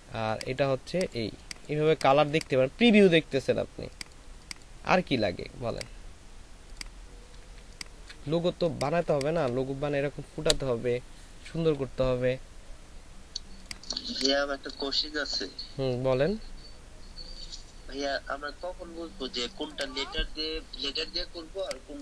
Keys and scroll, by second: 7.6 ctrl+alt+space, 9.0 ctrl+alt+space.